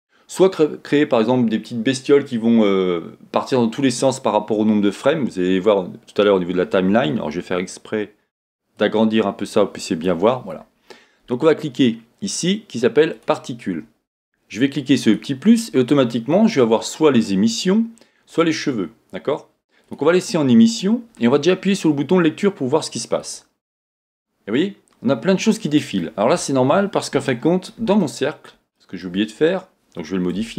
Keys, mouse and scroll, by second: 8.9-13.3 drag, 15.0 click, 18.3 click, 23.2-26.0 drag, 27.3-29.2 middle drag, 29.2-30.4 scroll up 2, 30.4 Tab.